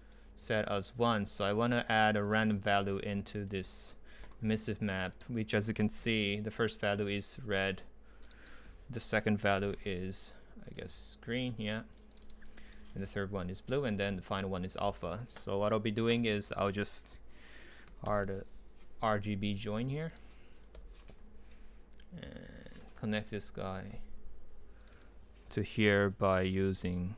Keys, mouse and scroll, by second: 3.5-4.9 drag, 5.0-6.1 drag, 8.3-9.4 drag, 9.4 Delete, 9.6 Return, 10.8 right click, 12.1 click, 13.0 right click, 13.4-13.9 right drag, 14.3 ctrl+z, 16.4 click, 19.8-20.7 drag, 20.7 Delete, 22.2 drag.